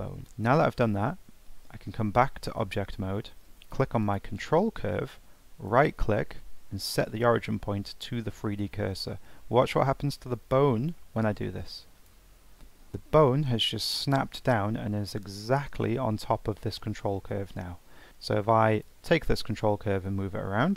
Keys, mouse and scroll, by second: 0.2 shift+middle click, 1.1 Tab, 1.6 scroll down 2, 1.9-2.7 middle drag, 2.7 scroll up 2, 3.0-4.0 middle drag, 4.0 click, 5.6-8.8 right drag, 18.7 click.